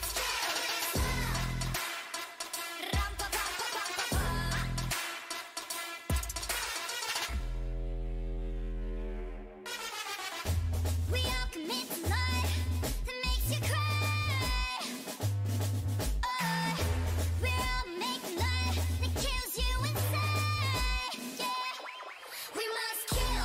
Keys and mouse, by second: 0.5 t, 1.5-3.7 drag, 5.3 t, 6.8-8.3 drag, 8.3 Tab, 9.4 Tab, 9.8 ctrl+a, 10.1 ctrl+a, 10.8 Tab, 11.4 s, 12.8 KP_3, 15.7 s, 17.0 middle click, 18.8-21.9 drag, 21.1 s, 23.3 middle click.